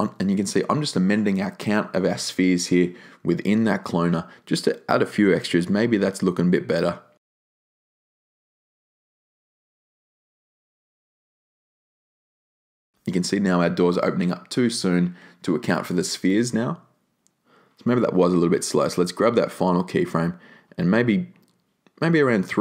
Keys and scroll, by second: 2.3 4, 2.7 Tab, 3.1 3, 3.5 Tab, 3.8 3, 4.2 Tab.